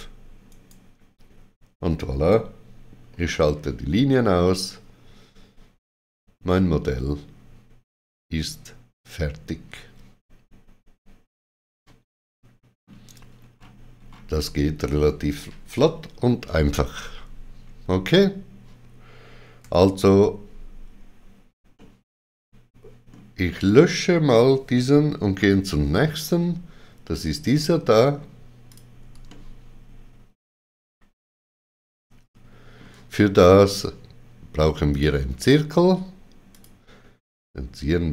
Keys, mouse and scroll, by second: 0.5 right click, 3.1 right click, 3.1 shift+click, 3.1 shift+w, 4.1 middle click, 13.3-13.9 scroll down 3, 21.5-22.3 typing, 21.8 middle click, 27.4-28.2 typing, 27.7 middle click, 28.7 click, 29.3 ctrl+middle click, 34.9 click, 36.5 click.